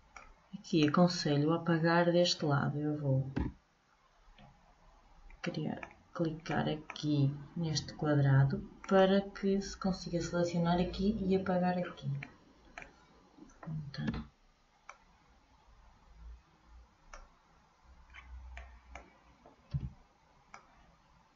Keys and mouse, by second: 0.2 click, 3.4 a, 5.6-7.6 middle drag, 8.9-12.0 drag, 12.0-14.2 middle drag, 14.2 b, 18.2-21.3 middle drag, 19.9 b.